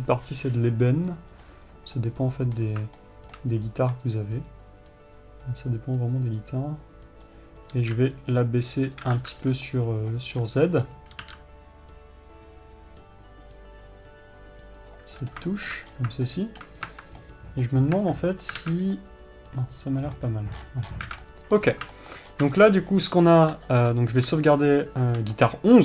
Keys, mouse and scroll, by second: 1.9-3.3 drag, 3.6-5.1 middle drag, 5.1-9.5 drag, 9.9-10.2 scroll down 2, 10.2-11.4 middle drag, 10.9 scroll up 2, 11.4 click, 15.8 scroll up 2, 16.3-20.8 middle drag, 16.4 scroll up 2, 17.4 Tab, 18.5 Tab, 19.4 scroll down 2, 20.8 click, 21.1 scroll down 1, 21.8-25.8 middle drag, 22.1 scroll up 1, 22.8 scroll up 1.